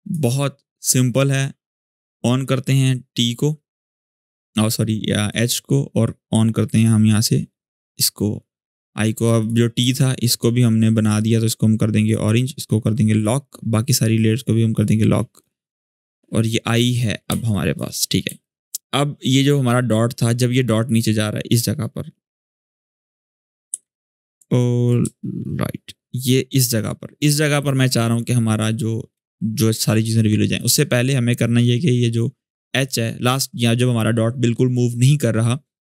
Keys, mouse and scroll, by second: 1.7 click, 9.6 shift+click, 10.8 click, 16.8 scroll up 1, 17.3 click, 17.5 space, 17.7 scroll up 1, 18.0 space, 18.2 click, 18.5 space, 19.2-21.4 drag, 23.2 click, 23.5 u, 24.3-24.7 alt+scroll up 1, 24.8-25.3 shift+scroll down 1, 25.8-26.4 drag, 29.0-30.2 drag.